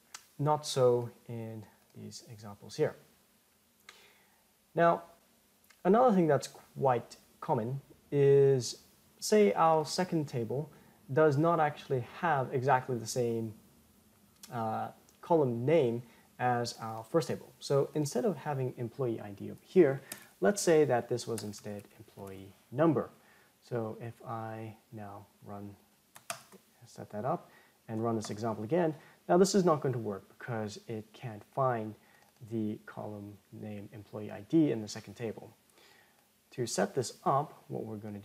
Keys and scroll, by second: 26.7 ctrl+Return.